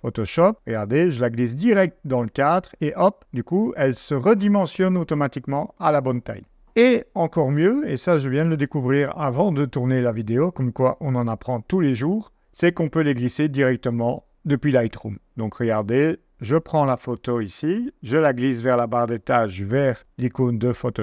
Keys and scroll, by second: 9.0 super+z, 11.1 super+z.